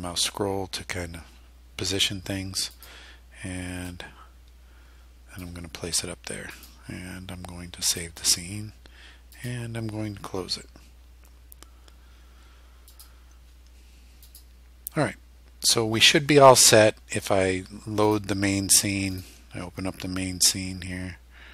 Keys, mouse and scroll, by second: 2.8 click, 3.9-5.6 drag, 6.6 click, 7.9 click, 9.4 click, 12.9 click, 14.3 click, 18.1 click, 19.2 click.